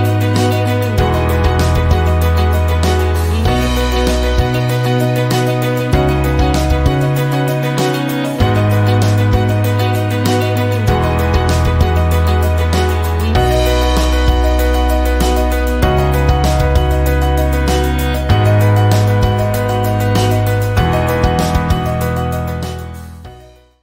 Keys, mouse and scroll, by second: 0.1 click, 3.3 click, 6.6 F10, 10.9 click, 17.6 click, 22.0 click.